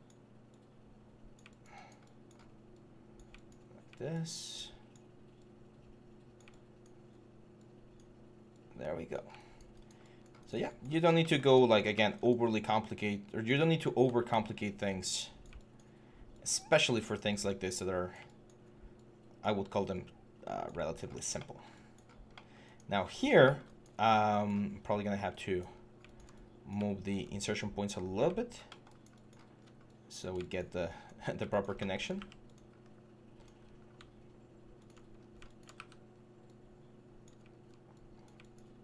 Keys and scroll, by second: 14.1 ctrl+d, 24.6 1, 25.5 4, 27.8 6, 31.0-33.4 typing, 35.0 5, 35.5 w.